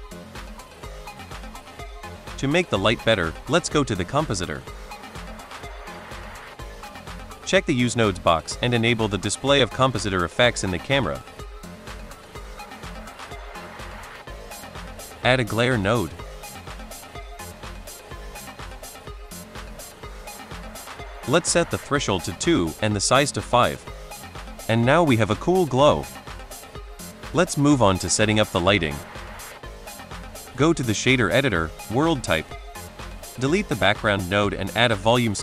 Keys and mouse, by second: 7.3 click, 8.7 click, 8.9 a, 9.4 KP_Decimal, 11.3-13.1 drag, 13.7 middle drag, 14.1 click, 14.4 click, 14.8 click, 15.0 shift+a, 16.7 click, 17.4 click, 17.7-18.6 drag, 19.2 middle click, 19.6-19.9 drag, 20.2 middle click, 20.8 middle click, 21.3 click, 22.5-23.8 drag, 25.6 click, 26.4 shift+middle click, 30.5 click, 31.3-32.0 drag, 32.8 middle click, 33.1 click, 33.4 ctrl+x, 33.8 shift+a.